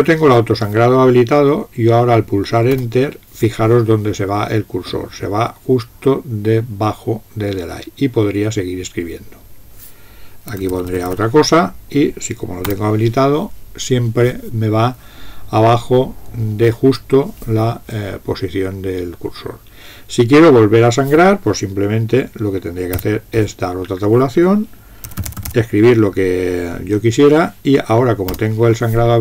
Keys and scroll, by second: 2.9 Return, 10.4-11.9 typing, 12.7 Return, 23.0 Tab, 24.8-26.0 typing, 28.3 Return.